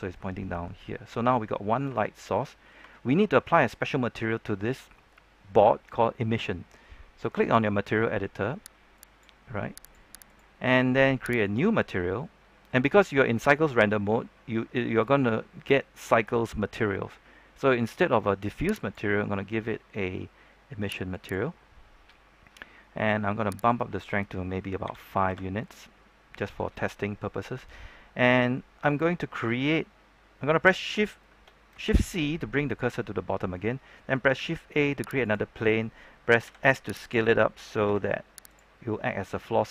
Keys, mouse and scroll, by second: 0.7-1.1 scroll up 1, 1.9 shift+middle click, 2.8 shift+middle click, 8.9 click, 24.8 KP_5, 27.8-28.2 scroll up 1, 28.3 shift+middle click, 31.8 shift+c, 32.3-34.1 scroll up 1, 34.3 shift+a, 35.2 click, 36.4 s, 36.9 click, 37.8 typing, 38.7-39.0 scroll down 1, 39.0-39.7 scroll up 1.